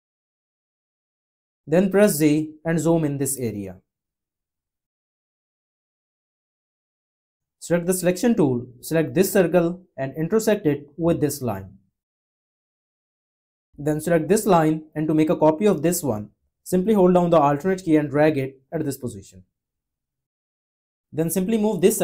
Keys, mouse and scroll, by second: 2.2 z, 17.4 alt+click.